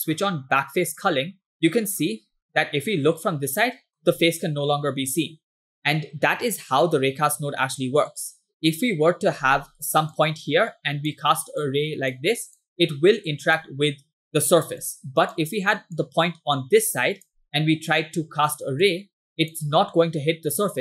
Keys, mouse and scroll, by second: 1.5-4.1 middle drag, 5.7-9.3 middle drag, 10.2 click, 11.7 click, 12.6-13.7 drag, 14.9 ctrl+click, 16.0-17.4 drag, 18.0 click, 18.9 click.